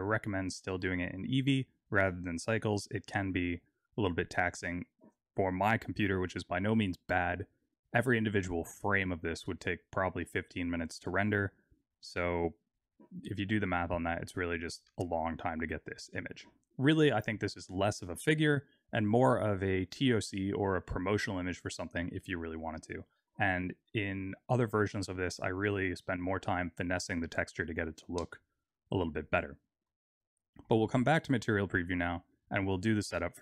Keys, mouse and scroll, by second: 29.8 z, 33.0 click.